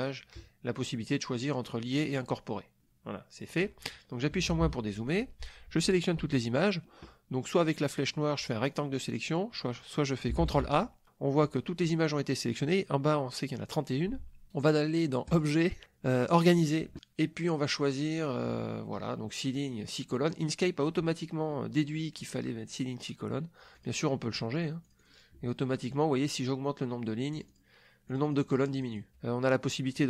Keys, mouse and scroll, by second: 2.8 click, 3.5 click, 4.3 KP_Subtract, 8.0 click, 8.7 click, 10.4 ctrl+a, 15.3 click, 16.3 click, 23.7 click, 24.8 click, 27.3 click, 28.0 click.